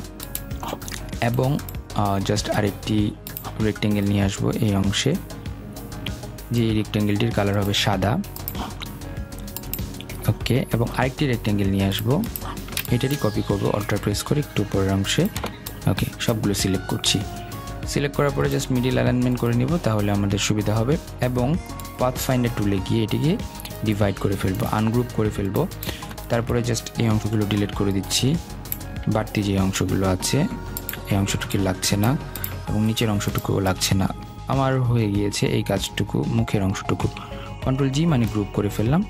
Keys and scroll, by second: 27.2 Delete, 37.7 ctrl+g.